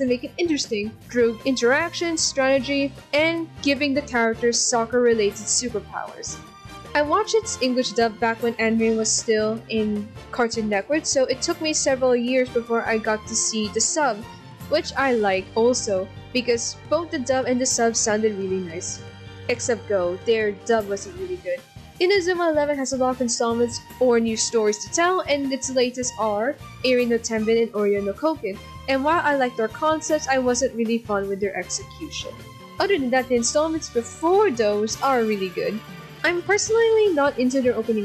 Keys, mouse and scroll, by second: 3.1 ctrl+z, 3.3 ctrl+z, 4.1 click, 4.6 z, 5.8 ctrl+z, 7.0 ctrl+z, 12.8 ctrl+=, 32.3 right click, 32.6 right click, 33.3 right click, 33.7 right click, 36.2 ctrl+-.